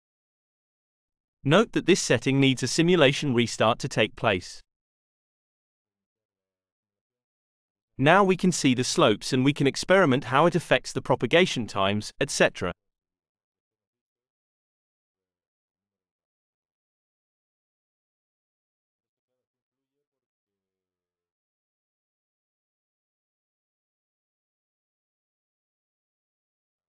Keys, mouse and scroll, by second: 2.6 click, 3.4 click, 4.0 click, 10.2-13.3 drag, 22.3 click.